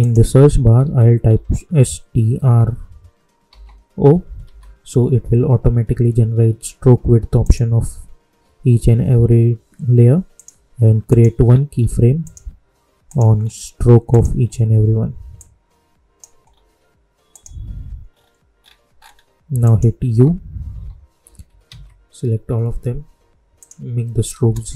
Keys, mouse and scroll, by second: 0.8 s, 3.0-5.1 typing, 7.3 click, 10.3 click, 11.4-12.2 scroll down 1, 12.2 click, 13.3 scroll down 1, 14.0 click, 14.3 scroll down 1, 15.3 click, 16.4-17.2 scroll down 1, 17.2 click, 18.0 scroll up 1, 19.6 click, 20.0 u, 21.6 ctrl+a, 23.5 click.